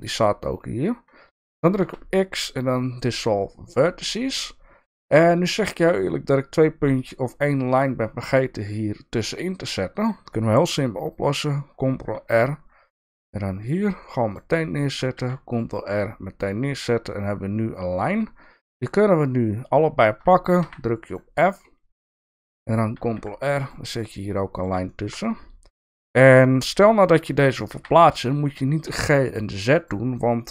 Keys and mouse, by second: 1.8 x, 4.3 shift+middle click, 5.5 shift+middle click, 11.9 ctrl+r, 14.0 click, 15.1 ctrl+r, 15.6 click, 18.8 shift+click, 20.6 f, 26.0 ctrl+r, 27.7 g.